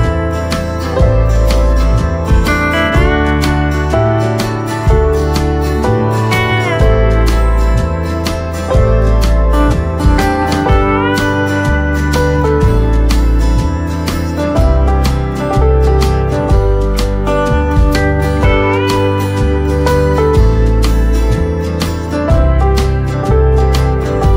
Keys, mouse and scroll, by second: 0.1 right click, 0.5 typing, 1.2 scroll down 1, 3.0 click, 5.5 right click, 10.5 click, 12.7 right click, 13.5 click, 15.1-16.5 typing, 18.4 click, 21.1 click, 23.1 right click.